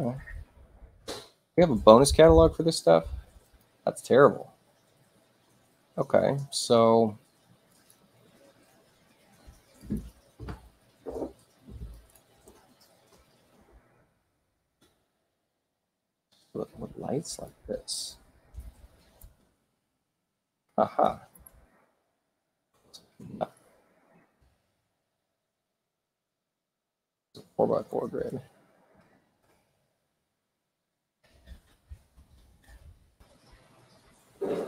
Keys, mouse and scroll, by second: 3.4 click, 7.7 click, 9.8 click, 11.9 click, 13.2 2, 13.5 Tab, 14.0 Tab, 14.5 2, 15.9 click, 17.2 click, 18.9 6, 19.2 Tab, 21.3 Tab, 23.3 click, 24.4 3, 24.6 Tab, 25.4 3, 25.6 Tab, 27.2 click, 28.2 Tab, 29.0 4, 29.2 Tab, 31.0 click.